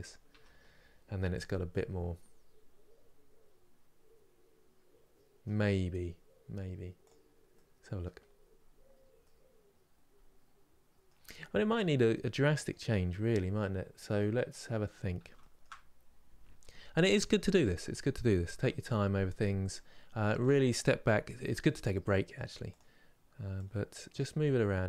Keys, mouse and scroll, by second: 0.0 Tab, 0.4 scroll down 1, 1.1 click, 1.4-5.1 middle drag, 5.5 scroll up 2, 6.7 click, 7.2 middle click, 7.9-8.3 scroll down 2, 9.0-11.1 middle drag, 11.1-11.4 scroll up 2, 11.5 Tab, 11.8-14.2 middle drag, 14.2 click, 15.1-16.4 shift+middle drag, 16.4 1, 17.3 KP_1, 20.2 click, 21.1 g, 23.8 click, 24.0 g.